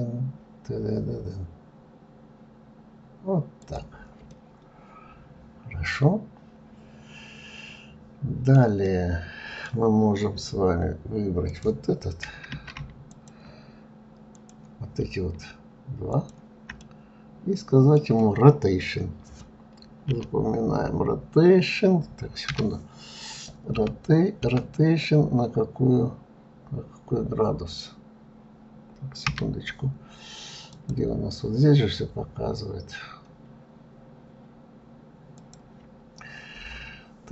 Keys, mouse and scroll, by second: 4.6-7.6 middle drag, 9.1-11.7 middle drag, 11.7 click, 13.3 shift+click, 14.6 click, 16.4 shift+click, 17.0-20.1 middle drag, 24.0 r, 24.7 r, 31.0 click, 35.6 click.